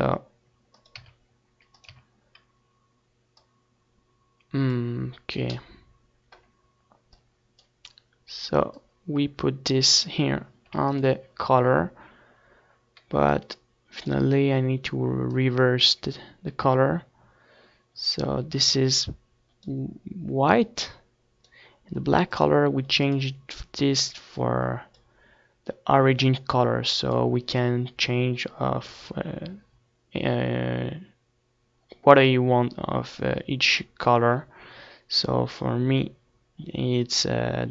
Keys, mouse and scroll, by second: 2.3 x, 6.2 middle click, 7.2-10.4 drag, 10.7 ctrl+s, 13.3-14.9 drag, 15.4-17.0 drag, 18.6-24.8 drag, 27.0-28.7 drag.